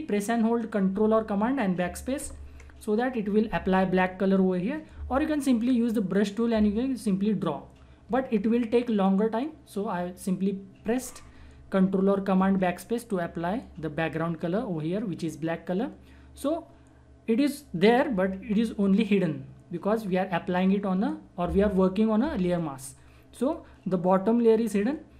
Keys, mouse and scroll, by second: 2.1 ctrl+BackSpace.